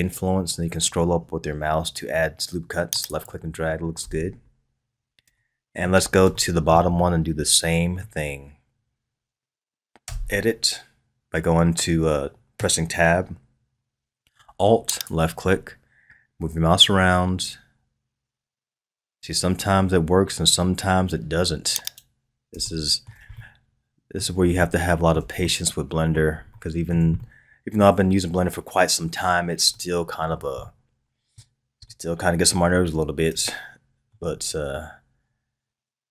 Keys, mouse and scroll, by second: 4.0 Tab, 4.5-5.3 scroll down 3, 5.3-8.3 shift+middle drag, 8.3-10.0 scroll up 2, 10.0 Tab, 14.9 alt+click, 21.8 right click, 22.6-28.3 shift+middle drag, 28.3-28.7 scroll up 2, 29.3-29.7 scroll down 1, 29.7-34.6 shift+middle drag, 34.6-35.8 scroll up 1, 35.8-36.1 scroll up 1.